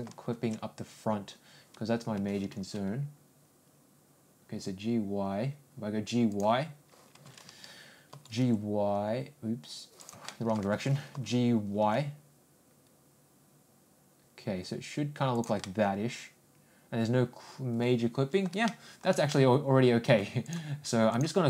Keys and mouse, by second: 2.1 ctrl+g, 8.1 ctrl+g, 10.3 middle click, 15.6-18.4 middle drag, 18.7 shift+middle click, 19.3 middle click, 20.4 click, 21.1 click.